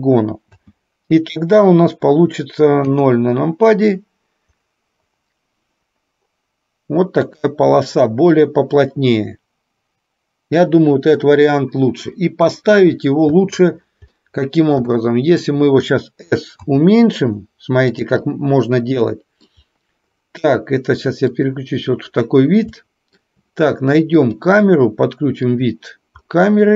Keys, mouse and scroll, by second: 1.0 space, 3.1 KP_0, 13.5 space, 14.2 middle click, 16.8 s, 18.3-19.7 middle drag, 21.5 click, 22.8 shift+middle click, 24.2 click, 25.5 click.